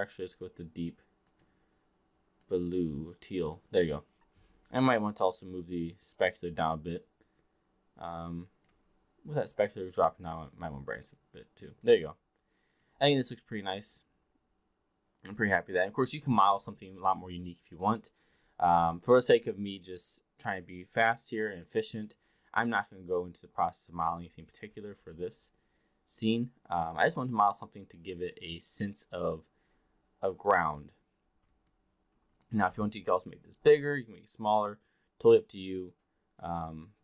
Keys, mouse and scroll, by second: 5.3-8.6 drag, 9.4 click, 12.6 click, 13.9-16.1 alt+drag, 22.6 click, 24.3 alt+middle drag, 24.8-29.0 alt+drag, 29.2 alt+middle drag, 30.7 alt+middle drag, 31.5-31.8 alt+drag, 32.6 e, 32.7 r, 34.0-37.0 drag.